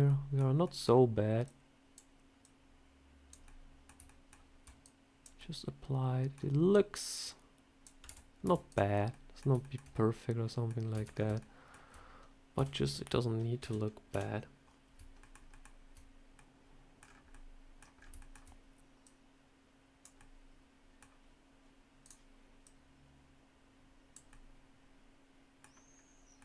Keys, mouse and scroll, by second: 0.5 middle click, 0.5 shift+middle click, 1.3 click, 2.3 click, 3.3 middle click, 3.9 shift+middle click, 4.7 click, 5.3 middle click, 6.6 click, 7.9 Tab, 8.3 Tab, 8.6 click, 8.8 scroll down 3, 9.0 middle click, 9.5 shift+middle click, 9.8 middle click, 10.8 Tab, 11.0 scroll up 5, 11.3 shift+middle click, 12.4 a, 13.5 KP_3, 14.0 KP_1, 15.1 shift+middle click, 15.4 shift+middle click, 16.2 middle click, 16.9 scroll down 4, 17.2 middle click, 17.9 scroll up 3, 18.1 shift+middle click, 18.9 click, 20.1 middle click, 21.9 click, 22.5 click, 24.2 middle click, 25.8 scroll down 2, 26.3 middle click.